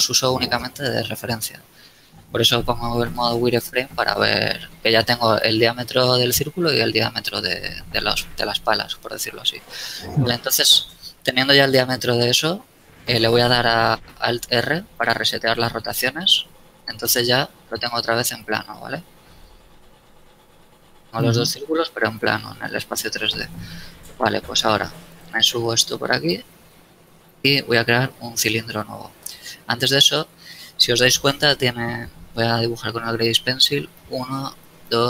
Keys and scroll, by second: 14.4 alt+r, 16.9 KP_3, 20.2 KP_7, 20.8 z, 23.6 KP_1, 27.5 a, 32.8 d.